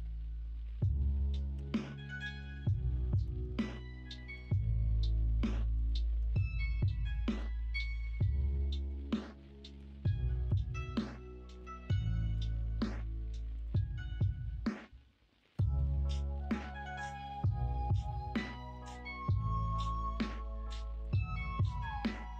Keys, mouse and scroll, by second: 1.5 y, 3.1 ctrl+z, 4.3 p, 6.2 Tab, 7.1 middle click, 7.3 Tab, 7.5 middle click, 8.2 middle click, 9.7 1, 10.4 2, 18.7-19.1 scroll up 1, 21.2 middle click, 21.5-22.1 scroll down 1, 22.1 2.